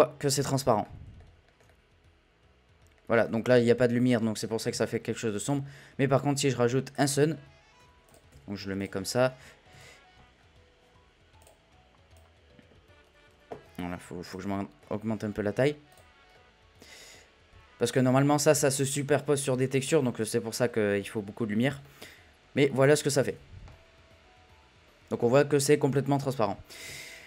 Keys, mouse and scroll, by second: 0.9-1.2 middle drag, 1.2 scroll down 1, 1.5-3.6 shift+middle drag, 3.6 z, 3.8-4.7 middle drag, 4.7 shift+a, 7.2-7.7 scroll down 1, 7.7 r, 9.0 middle drag, 9.2-9.7 scroll up 1, 9.7 z, 10.4-11.3 scroll up 3, 11.3 scroll up 1, 11.4 click, 12.4-14.7 drag, 14.7-15.2 middle drag, 15.2-15.7 scroll up 2, 15.9 click, 16.3-17.1 middle drag, 17.1-17.7 scroll up 1, 17.7-18.8 scroll up 1, 18.8-20.5 scroll up 1, 20.5 scroll up 1, 20.7-22.2 scroll down 3, 22.2-23.3 scroll down 1, 23.3-24.0 scroll down 1, 24.0 scroll down 1, 24.1 a.